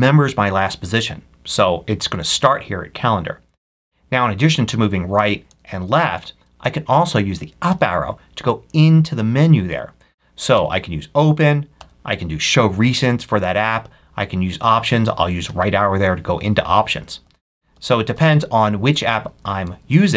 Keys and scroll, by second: 4.6 Right, 5.1 Left, 5.7 Right, 7.6 Up, 10.5 Up, 11.6 Up, 12.6 Up, 13.3 Up, 15.3 Right, 17.1 Down, 17.6 Down, 19.2 Left, 19.5 Down.